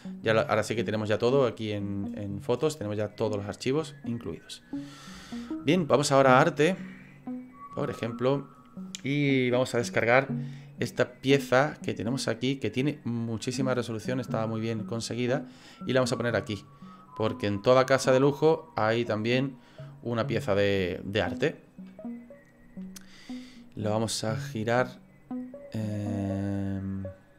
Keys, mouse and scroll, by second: 0.6 click, 6.4 click, 24.6 right click, 24.7 click.